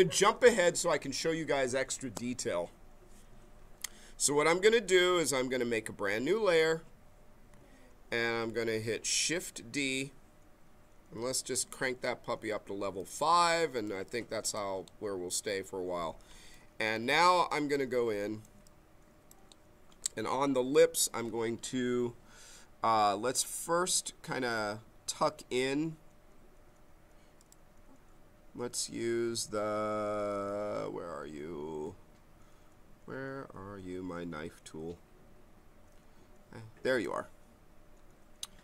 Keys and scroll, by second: 9.8 shift+d, 11.1 shift+d.